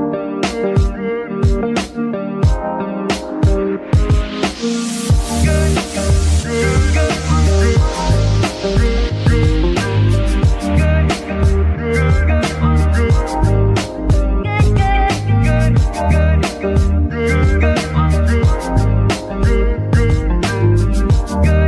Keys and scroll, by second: 1.8 g, 2.3 Escape, 6.4 g, 6.9 Escape, 7.8 g, 8.4 Escape, 15.9 Escape, 20.2 g, 20.8 Escape.